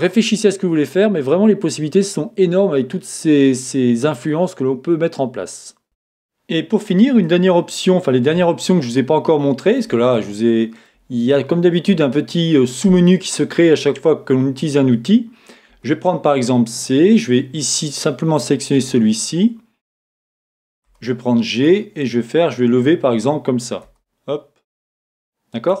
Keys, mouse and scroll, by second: 5.8 Tab, 5.8-8.4 drag, 7.5 a, 8.4-19.7 shift+middle drag, 15.7 c, 20.4 Escape, 20.9 g, 22.0-24.3 drag, 24.3-25.8 middle drag, 24.3 e.